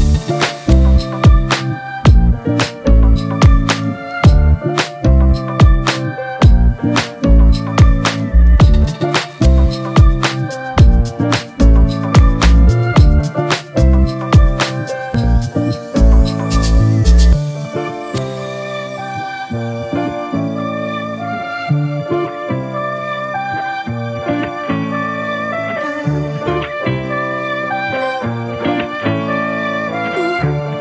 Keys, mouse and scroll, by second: 0.0 double click, 1.8-3.5 typing, 5.0 double click, 6.5-6.8 typing, 7.0 double click, 24.4 right click, 28.2 typing.